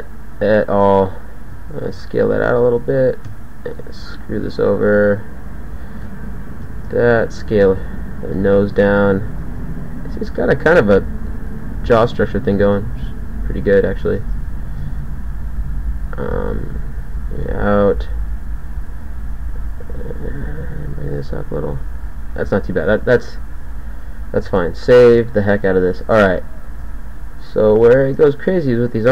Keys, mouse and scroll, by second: 1.7 ctrl+a, 3.3 e, 6.1 e, 6.7 ctrl+a, 7.8 g, 8.3 click, 12.6 ctrl+a, 14.1 ctrl+a, 15.3 g, 16.5 ctrl+a, 17.8 g, 19.8 g, 20.9 g, 22.0 g, 23.1 g, 24.6 s.